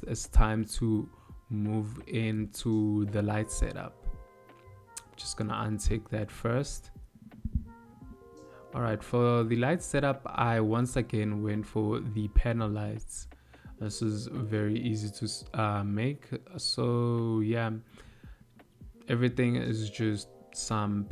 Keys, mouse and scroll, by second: 2.9 n, 4.1 click, 4.8 n, 8.1 KP_7, 9.9 ctrl+middle click, 11.1 shift+middle click, 12.1 ctrl+middle click, 14.8 click, 19.7 shift+middle click.